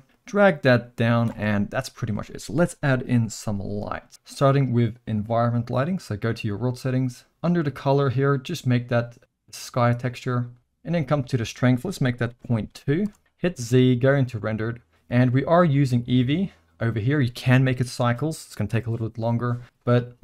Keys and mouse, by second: 0.2-1.4 drag, 1.3 space, 6.1 click, 7.5-10.1 drag, 11.1-13.2 drag, 13.4 z, 16.1 click.